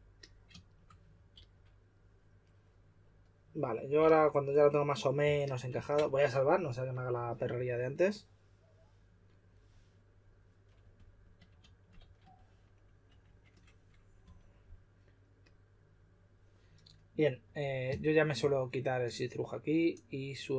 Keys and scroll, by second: 1.3 s, 4.0 typing, 12.0 typing, 13.0 typing.